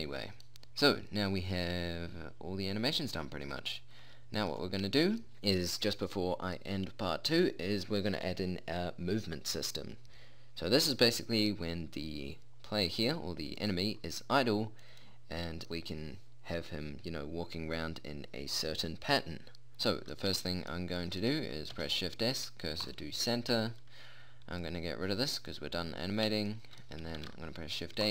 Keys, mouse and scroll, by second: 2.3-3.5 drag, 3.5-4.9 middle drag, 14.1-15.6 middle drag, 20.4-22.2 middle drag, 22.2 shift+s, 25.1-26.9 drag, 26.9 middle click, 27.7 shift+a.